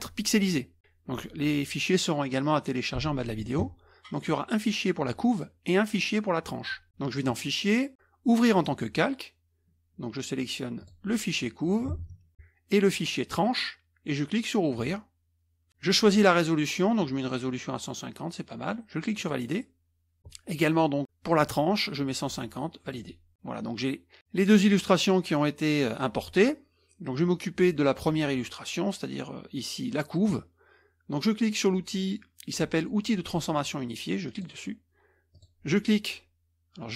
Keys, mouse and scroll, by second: 7.3 click, 8.5 click, 10.8 click, 14.7 click, 19.2 click, 22.8 click, 34.3 click, 35.3 click.